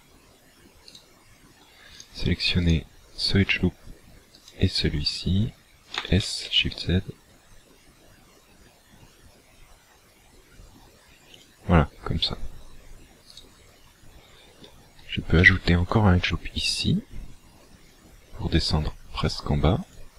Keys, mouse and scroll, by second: 0.9 alt+shift+right click, 1.9 alt+right click, 2.7 alt+right click, 4.3 alt+shift+right click, 5.9 s, 11.5 shift+click, 13.3 alt+right click, 15.3 ctrl+r, 19.9 click.